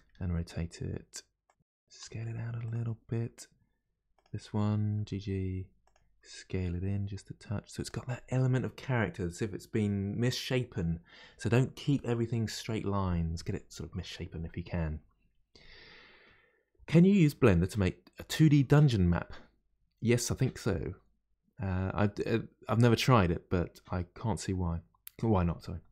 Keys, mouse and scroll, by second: 4.2 click, 5.0 g.